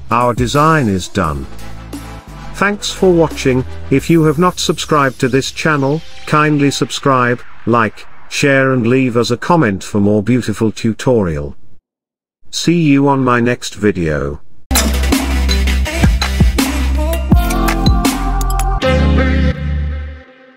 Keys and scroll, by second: 12.4 ctrl+z.